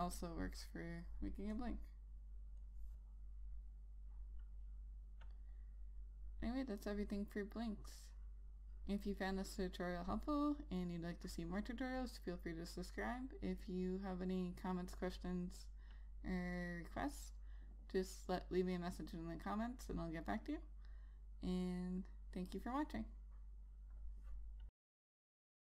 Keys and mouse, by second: 0.2 Return, 2.3 click, 7.5 click.